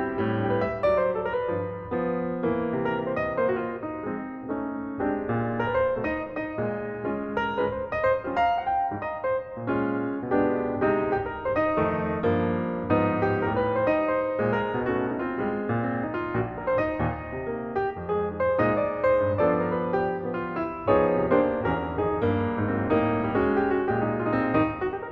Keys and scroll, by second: 1.3 super+space, 4.8 space, 5.7 space, 9.1 shift+space, 12.1 shift+space, 20.3 super+space.